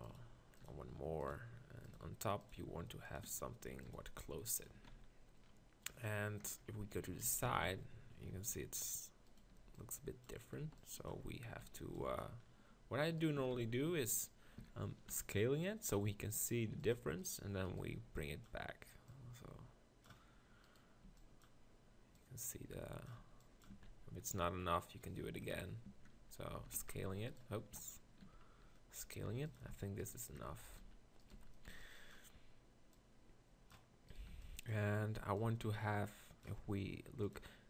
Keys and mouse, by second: 0.0-1.3 typing, 2.4-4.9 typing, 4.8 Tab, 6.5-7.5 KP_6, 8.0 z, 8.5 z, 9.6 b, 10.6 b, 11.6 b, 12.8 s, 13.4 s, 14.6 s, 18.0 b, 21.0 b, 23.2 b, 23.7 Tab, 23.9 z, 25.4 KP_3, 25.8 Tab, 26.5 s, 27.8 s, 29.7 Tab, 30.4 Tab, 30.9 b, 31.3 z, 31.7 b, 34.3 b.